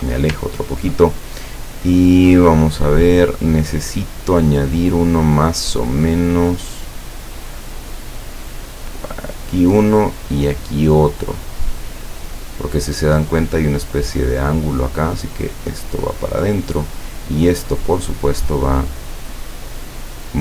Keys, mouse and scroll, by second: 8.9 click, 10.5 click, 11.5 click, 15.3-16.8 drag, 17.7 click, 19.6-20.4 drag.